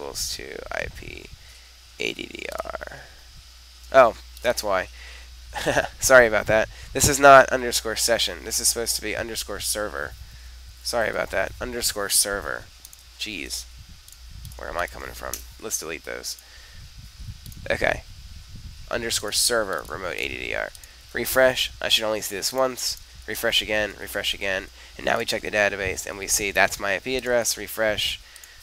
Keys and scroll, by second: 10.1-11.7 typing, 13.3 super+s, 21.0 super+r.